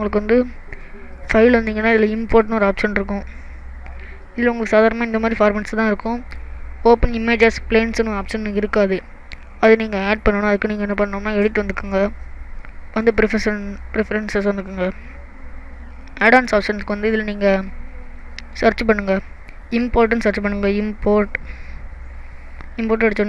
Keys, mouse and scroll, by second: 1.2 click, 11.8 click.